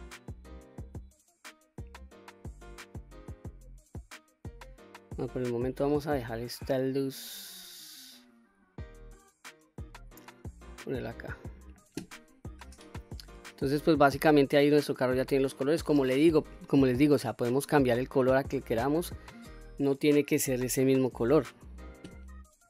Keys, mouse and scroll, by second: 0.9-5.5 drag, 6.5-11.7 drag, 12.6-15.8 middle drag, 18.5-19.3 middle drag.